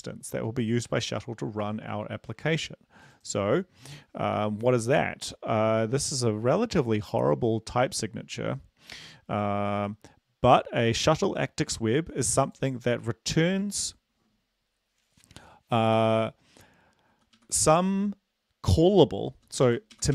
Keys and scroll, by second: 20.0 Right.